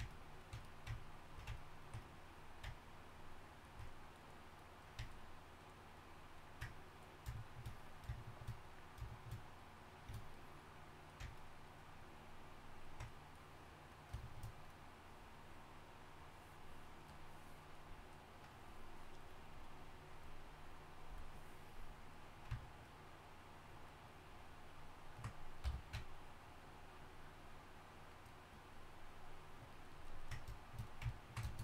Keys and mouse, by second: 7.8 middle click, 8.4 middle click, 13.9-22.6 right drag, 22.6-28.4 drag, 25.6 f, 30.1-31.6 drag.